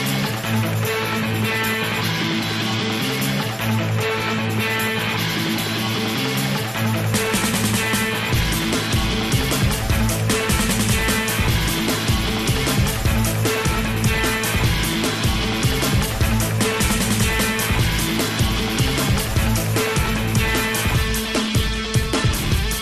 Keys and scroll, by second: 18.8 i, 19.3 i, 19.9 i, 20.6 i.